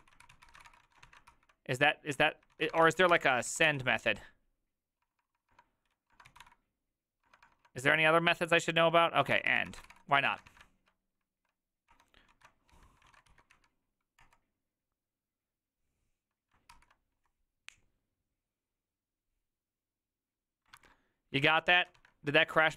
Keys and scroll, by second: 0.0-1.1 typing, 0.3 ctrl+w, 0.4 ctrl+o, 0.5 ctrl+c, 0.6 ctrl+:, 0.9 Return, 0.9 ctrl+a, 1.4 ctrl+c, 2.2 Up, 2.6-7.7 typing, 5.6 Up, 7.7 Up, 9.1-10.6 typing, 12.0 Return, 12.1-13.6 typing, 13.2 ctrl+a, 13.6 Up, 14.3 Return, 16.8 ctrl+c, 21.5 alt+{, 21.8 ctrl+a, 22.0 2.